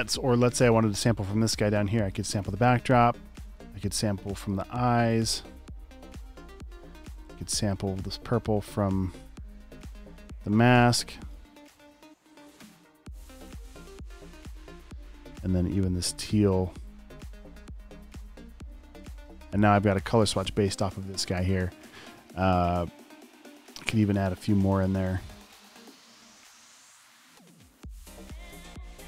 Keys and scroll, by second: 10.7 v, 18.9 v, 28.9 i.